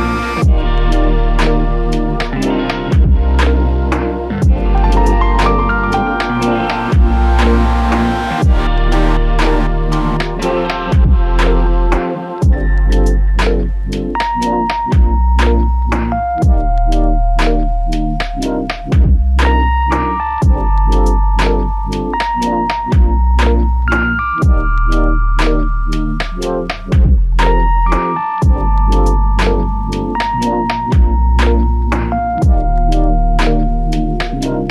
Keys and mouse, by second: 3.4 double click, 9.2 double click, 14.9 double click, 17.0 ctrl+click, 21.1 double click, 24.1 alt+click, 26.7 alt+click, 33.0 ctrl+click.